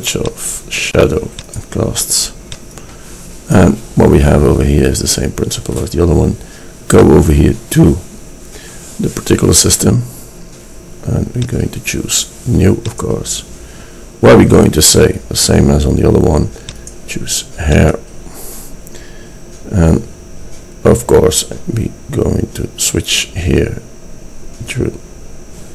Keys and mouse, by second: 7.2-8.9 drag.